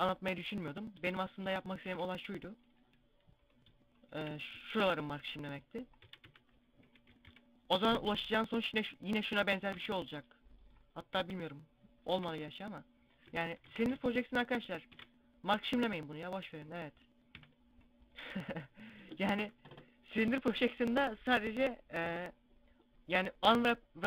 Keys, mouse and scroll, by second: 1.6 ctrl+e, 3.2 right click, 3.8 shift+right click, 4.6 ctrl+e, 5.8-7.8 typing, 9.5 u, 11.1-11.9 scroll up 2, 11.9 u, 13.3 a, 13.7 a, 14.7 ctrl+e, 17.2 u, 19.2 u.